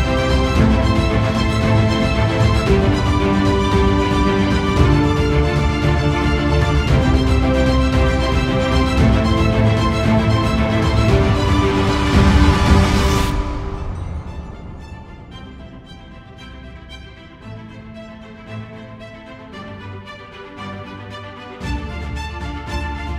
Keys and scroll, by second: 14.6 ctrl+z, 19.0 ctrl+alt+=, 19.8 space.